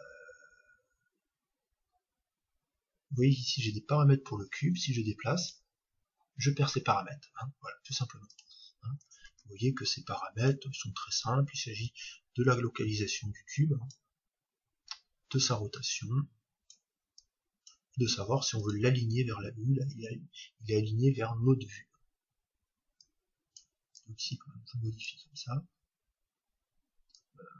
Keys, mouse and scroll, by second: 0.7-3.0 middle drag, 4.8 g, 5.4-8.4 drag, 10.4 shift+a, 11.8-13.8 drag, 15.3-20.4 drag, 23.0-25.7 drag, 27.2-27.5 drag.